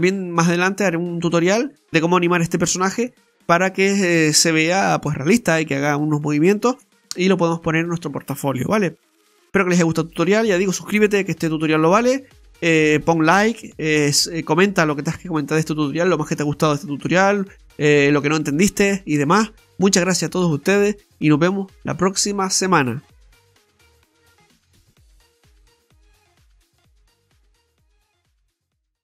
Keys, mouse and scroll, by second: 1.9-2.5 scroll down 1, 3.2 middle click.